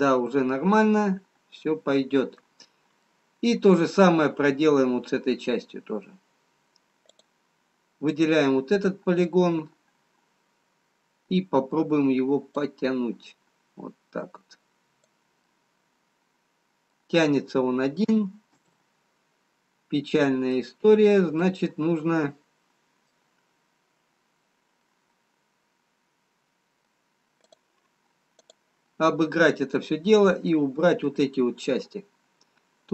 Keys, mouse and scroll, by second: 4.5 middle click, 8.7 click, 10.8 middle click, 13.4 click, 16.5 middle click, 18.6 ctrl+z, 21.2 middle click, 24.9 middle click, 28.8 click, 30.6 middle click.